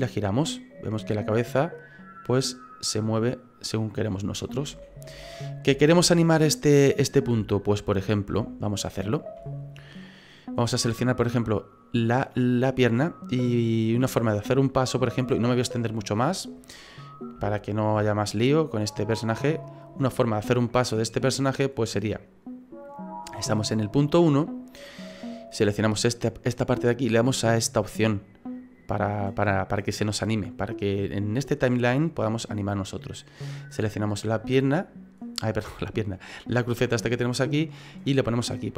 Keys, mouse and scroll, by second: 4.6 click, 4.7 ctrl+z, 5.1 ctrl+z, 5.4-5.8 scroll down 3, 5.8 shift+middle click, 6.2 middle click, 7.1-7.5 scroll up 3, 7.5 middle click, 8.0-8.3 scroll up 3, 8.4 shift+middle click, 9.6-10.6 scroll down 2, 10.6 middle click, 11.5 right click, 12.3 middle click, 13.9 click.